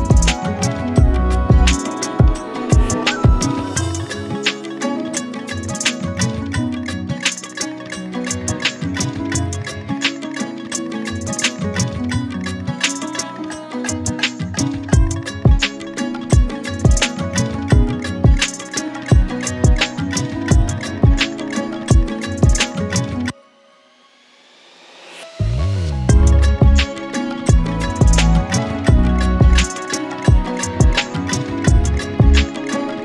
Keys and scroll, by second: 0.5 KP_5, 0.5 KP_0, 3.1 shift+Return, 6.8 shift+Return, 8.6 shift+Return, 17.3 Return, 24.6 Delete, 26.7 space, 28.1 p.